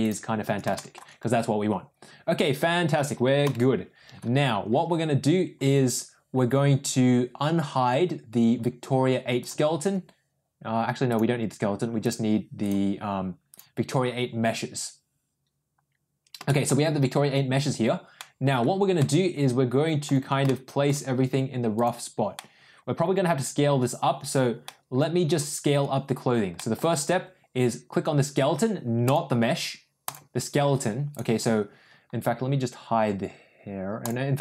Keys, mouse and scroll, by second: 0.0 click, 0.6 shift+middle drag, 3.3 n, 9.3 click, 11.0 click, 12.0 click, 12.6 click, 13.6 click, 16.4 shift+middle drag, 18.1-18.4 middle drag, 18.9-20.0 middle drag, 20.4 shift+middle click, 21.7 click, 22.3-22.8 middle drag, 24.5-25.2 middle drag, 26.5 middle click, 30.0 click, 33.9 click.